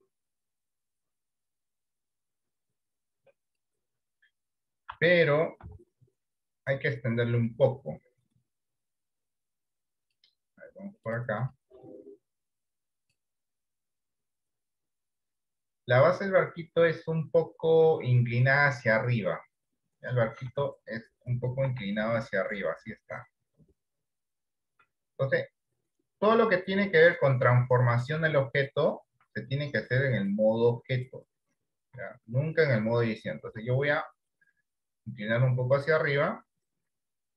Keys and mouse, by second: 2.3-3.6 drag, 4.9 s, 10.1 click, 11.2 click, 11.4 click, 20.6 Tab, 21.8 r, 27.7 shift+middle click, 30.3 click, 33.5 r.